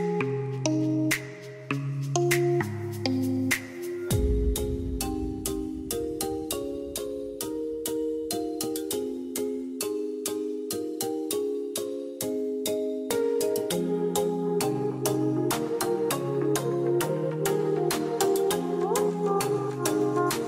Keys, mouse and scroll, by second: 4.4-9.3 drag.